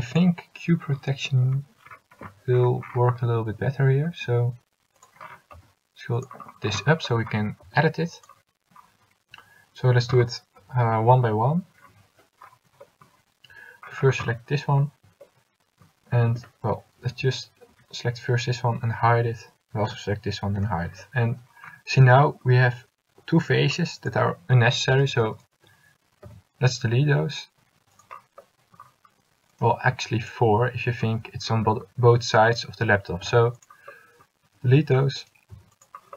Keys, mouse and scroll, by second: 3.6 a, 4.2 s, 5.7 s, 7.8 s, 10.1 a, 11.6 l, 16.4 a, 17.1 l, 17.8 l, 19.0 h, 20.0 l, 20.8 h, 26.4 x, 30.0 x, 33.3 x, 35.6 x.